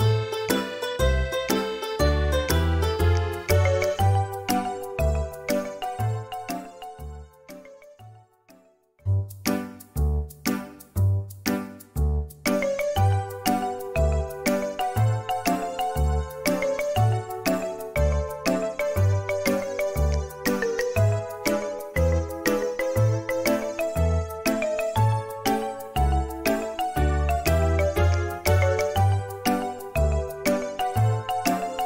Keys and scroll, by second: 2.3 |, 5.9 space, 8.3 Delete, 11.9 Delete, 13.8 Delete, 19.4 m, 25.8-26.8 typing, 28.0 Return.